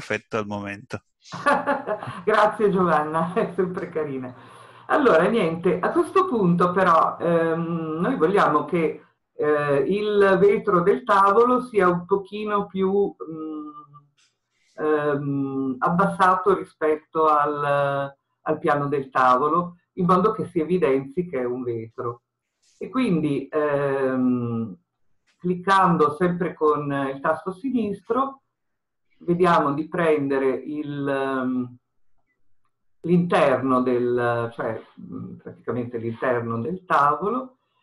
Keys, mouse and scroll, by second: 34.6-35.1 scroll up 2, 35.1 scroll down 2.